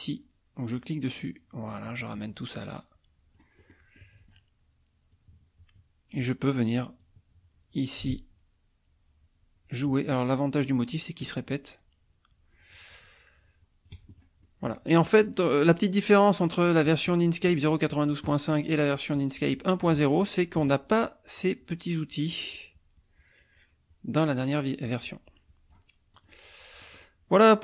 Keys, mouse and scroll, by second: 0.0-3.5 drag, 3.7 middle click, 5.1-6.3 drag, 7.0-14.4 drag, 14.5 ctrl+click, 15.2 click, 21.4-25.9 drag, 26.2 click, 26.9 middle click.